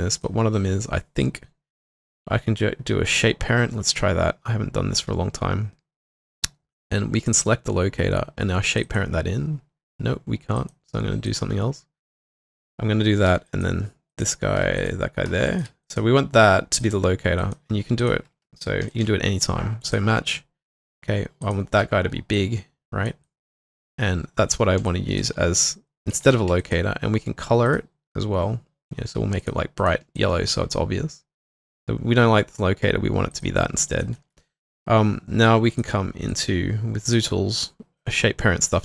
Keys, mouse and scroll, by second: 8.8-10.8 scroll up 1, 13.3 double click, 13.5 shift+click, 15.5 shift+click, 17.4 double click, 18.9 v, 21.8 r, 23.6 alt+click, 24.6 q, 24.9 alt+click, 25.3 w, 26.6 alt+click, 29.8 double click, 30.2 alt+click, 33.9 alt+right click, 34.2 alt+middle click, 36.3 double click.